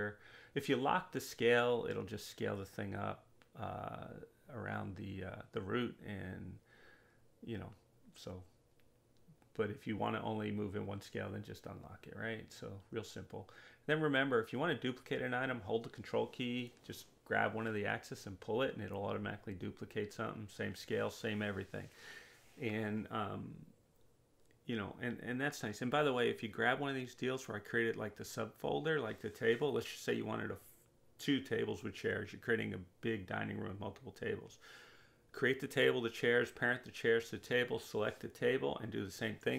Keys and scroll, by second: 1.1-2.4 typing.